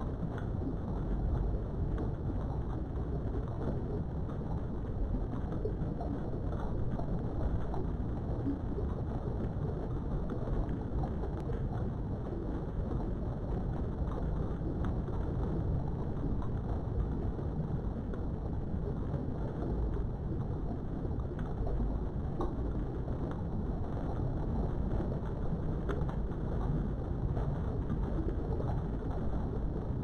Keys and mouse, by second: 1.4 middle click, 3.4 middle click, 4.3 KP_3, 6.4 e, 8.6 click, 11.1-12.3 typing, 12.9 KP_Enter, 14.2 Tab, 14.6-17.2 middle drag, 17.6 KP_3, 18.2 Tab, 20.4 1, 21.5 click, 22.3 shift+middle click, 23.2 click, 24.0 g, 24.7 click, 25.3 click, 25.6 g, 26.3 click, 27.3 click, 27.9 g, 29.6 click.